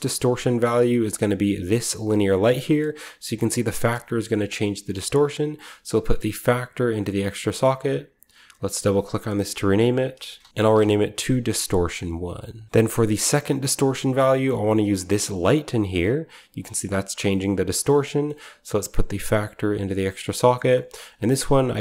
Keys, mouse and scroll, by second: 0.7-1.6 scroll up 1, 1.6 click, 2.5-2.9 scroll up 1, 2.9-5.1 drag, 5.9-6.9 drag, 7.1-7.8 drag, 8.5-10.1 drag, 10.2-11.1 typing, 11.6-12.6 middle drag, 12.4-13.1 typing, 12.6-13.6 scroll down 1, 13.2-14.9 middle drag, 13.6-14.9 scroll up 1, 14.9 drag, 14.9-15.5 scroll up 1, 17.8-20.1 middle drag, 17.8-18.8 scroll down 1, 18.8-20.1 scroll down 1, 20.0-20.7 typing, 20.2 click, 20.8 click, 21.0 ctrl+click, 21.0 ctrl+v.